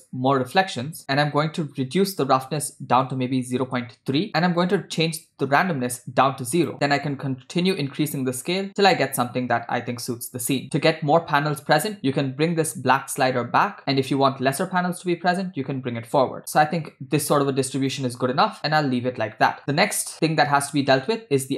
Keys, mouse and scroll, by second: 2.0-3.7 drag, 4.4 middle click, 4.4-5.0 scroll down 1, 5.0-10.6 drag, 12.0 click, 12.9-18.0 drag, 19.1 scroll down 2, 19.4 middle click, 19.6 scroll down 1, 20.1 middle click.